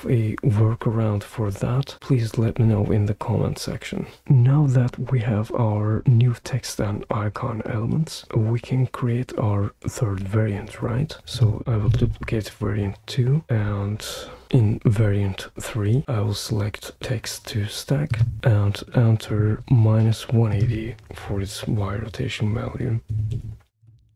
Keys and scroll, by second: 11.8 super+d, 22.8-24.1 typing.